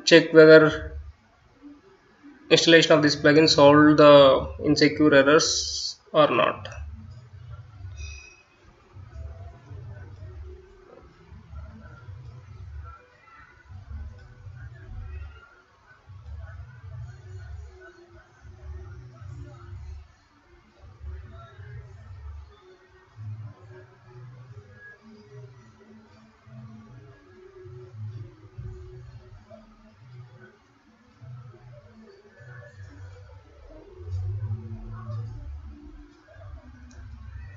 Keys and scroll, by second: 0.3-6.9 typing, 12.2 F9, 16.4-36.0 typing.